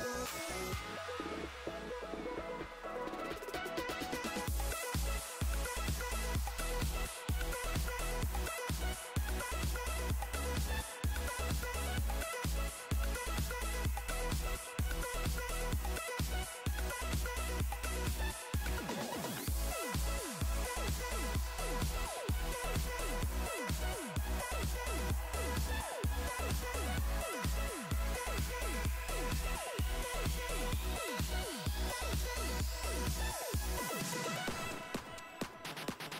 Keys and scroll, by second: 35.4 s, 35.7 s.